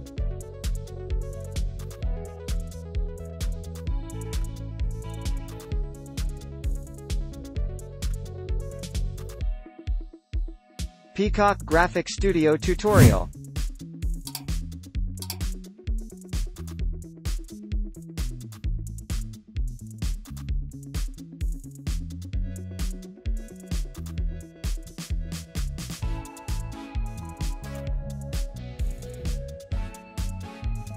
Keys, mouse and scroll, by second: 2.9 typing, 4.7 alt+right click, 6.3 typing, 6.7 double click, 10.4 scroll down 1, 13.4 ctrl+d, 13.6 scroll up 1, 14.3-14.8 scroll down 1, 18.9 shift+click, 19.6 shift+click, 20.7-21.5 scroll down 1, 21.5-23.1 scroll up 1, 26.6 right click.